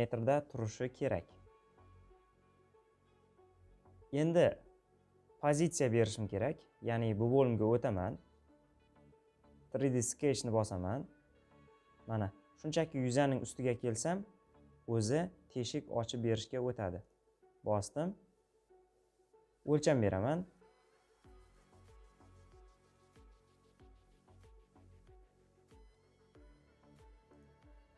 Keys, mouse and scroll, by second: 16.8-27.9 drag.